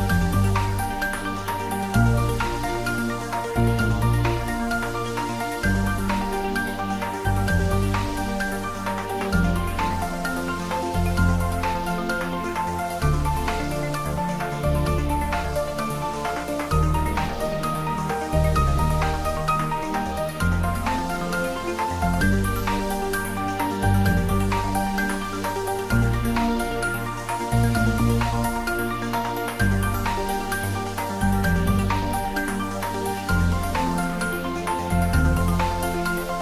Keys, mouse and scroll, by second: 0.7-3.0 scroll up 1, 6.2 click, 7.8 click, 8.5-9.9 scroll up 1, 9.9 Tab, 10.9-11.3 scroll up 1, 14.0-14.5 typing, 15.5 scroll up 1, 19.2-20.6 typing, 21.1 click, 21.7-24.1 typing, 24.8 click, 26.5-27.3 scroll up 1, 28.7-30.5 scroll up 1, 30.7 r, 32.1 click, 32.3 click, 33.1 ctrl+z.